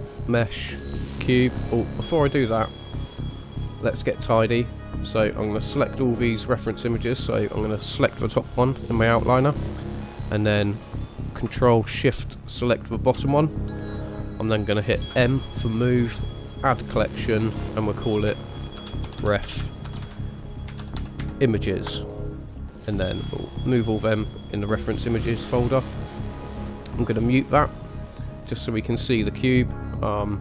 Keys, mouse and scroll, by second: 1.8 middle click, 4.1 click, 5.4 click, 8.1 click, 12.7 ctrl+shift+click, 15.1 m, 24.9 middle click, 27.8 click, 28.7 click, 30.1 click.